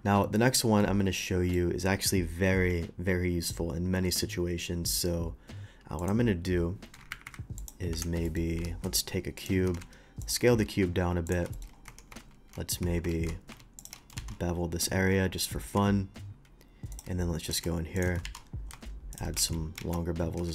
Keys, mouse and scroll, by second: 0.8-1.5 middle drag, 6.0 click, 7.1 Escape, 7.3 Escape, 7.6 click, 7.9 Delete, 8.2 middle click, 8.9 shift+a, 9.4 click, 9.7 s, 9.8 z, 10.2 click, 11.3 ctrl+a, 11.3 ctrl+click, 11.5 shift+middle drag, 11.7 shift+scroll up 1, 11.9 Tab, 12.2 ctrl+x, 13.1 ctrl+z, 13.8 click, 14.6 ctrl+b, 14.6 middle click, 15.3 middle click, 16.9 shift+click, 17.4 shift+click, 18.0 shift+click, 18.6 ctrl+b, 18.6 ctrl+middle click, 19.1 shift+click, 19.8 alt+x, 20.4 Tab.